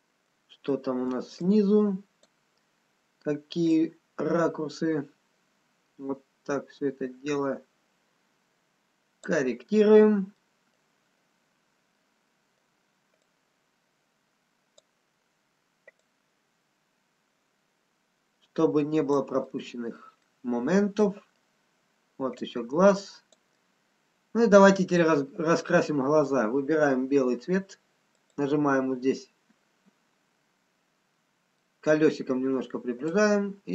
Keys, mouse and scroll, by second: 2.2 click, 2.7-3.1 scroll up 2, 3.6-4.2 scroll down 2, 4.2 click, 9.7 scroll down 2, 10.4 middle click, 11.6 scroll up 2, 12.4 middle click, 13.8 click, 15.3-16.1 scroll down 1, 16.4 click, 19.7 middle click, 21.1 middle click, 21.1-22.0 scroll down 1, 22.0-22.8 scroll up 3, 22.8 click, 23.5 middle click, 28.1 click, 30.6-31.4 scroll up 1, 31.4-32.4 scroll down 1, 32.4 middle click, 33.2 click.